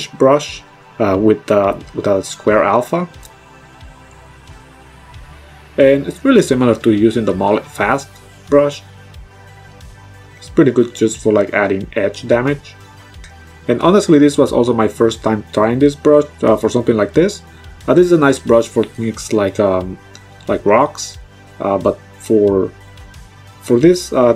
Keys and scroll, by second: 1.3 -, 6.2 space.